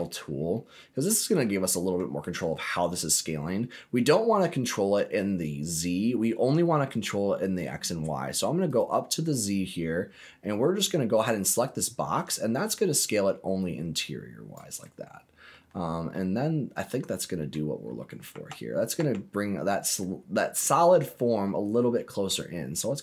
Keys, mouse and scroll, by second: 0.5-1.9 middle drag, 3.4 scroll down 1, 3.8 scroll up 1, 4.1 middle click, 7.0 middle click, 8.6 click, 9.5 scroll up 2, 11.8-14.5 drag, 14.8 scroll up 1, 14.8 middle click, 15.5-16.1 scroll down 2, 16.1-17.5 middle drag, 18.3 Tab, 19.2 Tab, 20.0 middle click, 21.2-21.8 scroll up 3, 22.0 middle click.